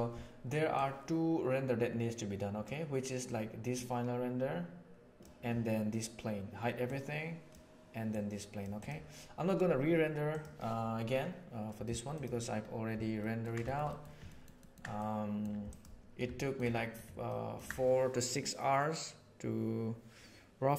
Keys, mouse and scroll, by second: 0.7-1.6 middle drag, 1.6-2.6 drag, 3.7-4.5 drag, 4.5-5.2 middle drag, 6.8-7.5 middle drag, 8.0-8.6 right drag, 8.8 right click, 13.1 ctrl+middle click, 13.5 shift+middle click, 13.8 middle click, 14.2 ctrl+middle click, 14.5 ctrl+middle click, 14.9 middle click, 16.3 shift+middle drag, 16.6 middle click, 17.2 ctrl+middle click.